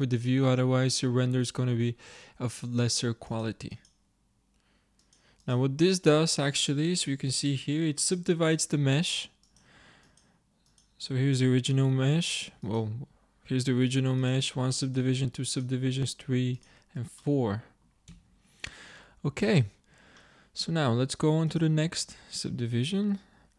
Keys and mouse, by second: 3.3-7.4 drag, 6.4 z, 7.5-9.5 middle drag, 9.5-12.8 drag, 17.2-18.5 middle drag, 18.2 z, 20.3 middle click, 21.8-23.5 middle drag.